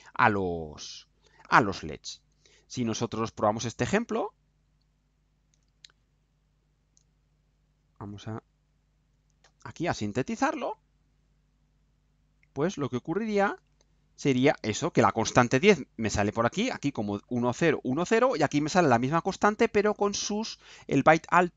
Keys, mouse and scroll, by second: 2.5 click, 4.7 ctrl+u, 6.0 ctrl+u, 7.3 ctrl+click, 8.4 ctrl+u, 10.2 scroll down 2, 10.7 scroll down 2, 11.0 right click, 12.0 scroll down 2, 13.0-14.8 right drag.